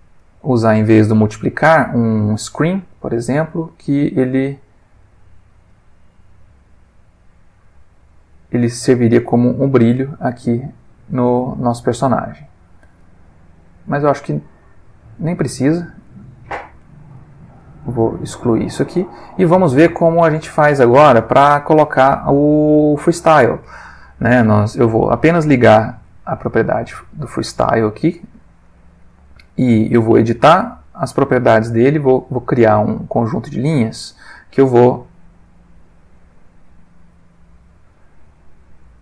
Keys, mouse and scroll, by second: 0.2-2.6 drag, 4.2 click, 5.0 click, 5.7-6.2 drag, 6.6 click, 7.6-8.1 drag, 8.3-8.7 drag, 9.0 click, 9.6-10.0 drag, 10.4 click, 11.1 click, 11.7 click, 12.4 click, 13.0 click, 13.7-15.4 drag, 15.8 click, 16.2 middle click, 17.2-17.7 ctrl+middle drag, 18.0 ctrl+click, 18.2 x, 18.8 click, 20.1-20.9 drag, 24.9 click, 25.6 middle click, 27.1 click, 27.6 click, 28.7 middle click, 29.4 middle click, 30.2 click, 30.7 middle click, 31.2 middle click, 33.6 click, 33.9-34.6 middle drag, 34.7 middle click, 35.4 middle click, 36.2-37.2 middle drag, 37.3-38.4 middle drag, 38.8 click.